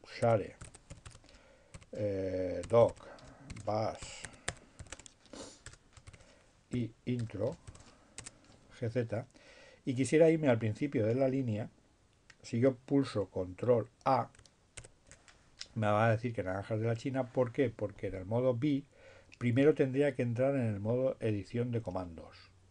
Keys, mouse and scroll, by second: 0.3-4.6 typing, 5.8 shift+BackSpace, 6.0 shift+7, 7.2 BackSpace, 7.5 shift+i, 7.7 shift+Tab, 14.7 ctrl+a, 15.5 BackSpace.